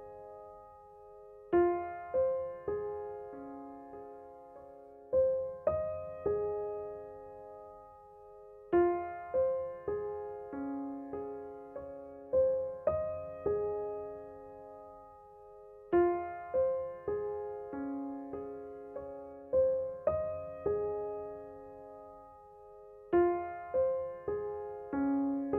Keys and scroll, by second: 24.1 0.